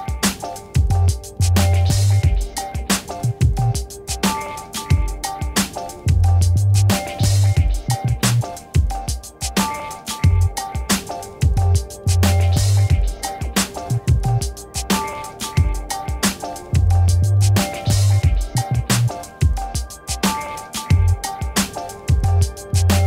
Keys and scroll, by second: 13.2 ctrl+shift+Left, 17.5 c, 18.0 y.